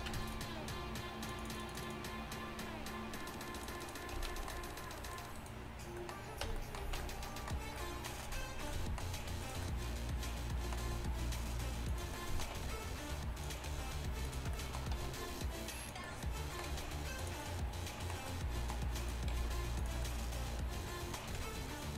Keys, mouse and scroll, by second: 0.2 Tab, 3.1-4.3 drag, 4.2 z, 4.5-6.0 drag, 5.1 middle click, 5.1 right click, 6.2 right click, 6.5 Tab, 6.9 right click, 6.9 z, 9.7 middle click, 10.9 e, 12.6 r, 13.8 g, 15.0 r, 15.9 g, 16.8 g, 18.5 g, 19.4 g, 21.4 r.